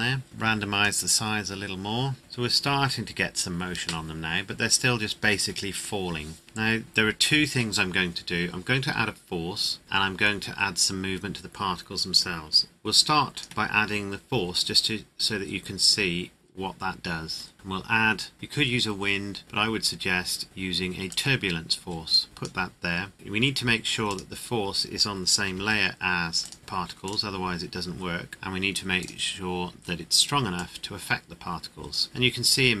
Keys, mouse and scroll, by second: 0.2 click, 2.2 scroll up 1, 6.8 middle click, 13.3 click, 13.4 shift+a, 21.0 click, 24.0 click, 25.5 m, 26.4 click, 29.0 click.